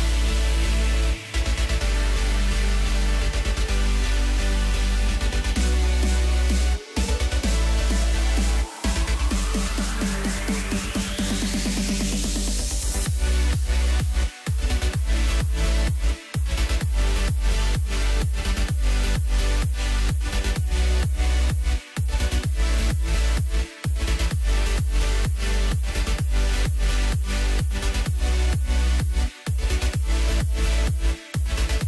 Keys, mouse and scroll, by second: 0.1 scroll down 3, 0.3-1.1 middle drag, 1.1 scroll up 3, 1.8 ctrl+KP_2, 1.9 ctrl+KP_2, 2.2 ctrl+KP_2, 3.4 KP_1, 4.5 KP_7, 5.5 KP_3, 6.6-7.3 scroll down 1, 7.4 ctrl+KP_8, 7.5 ctrl+KP_8, 8.1 ctrl+KP_6, 8.5 ctrl+KP_6, 10.3 KP_4, 11.3 KP_1, 13.5-14.0 scroll up 1, 14.2-15.4 scroll down 1, 15.9 click, 17.0-20.0 drag, 21.0 click, 22.2 click, 22.6-23.7 drag, 24.3-27.0 drag, 28.1 Tab, 29.1 a, 30.8 KP_Decimal, 31.7 scroll down 3.